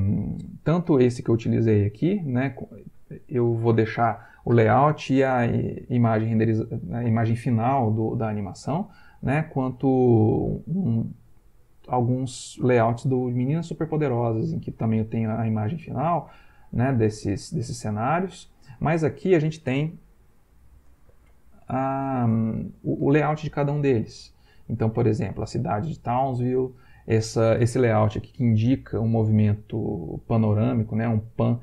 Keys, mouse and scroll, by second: 0.1 Right, 0.7 Left, 2.4 Right, 3.2 Left, 4.6 Right, 8.3 Right, 15.5 Right, 20.6 click, 26.2 Right.